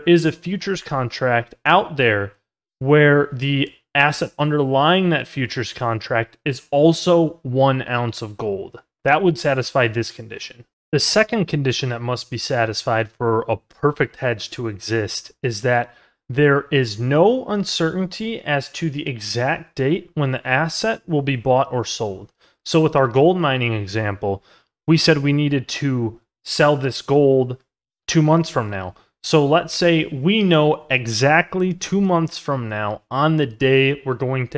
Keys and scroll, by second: 8.3 ctrl+z.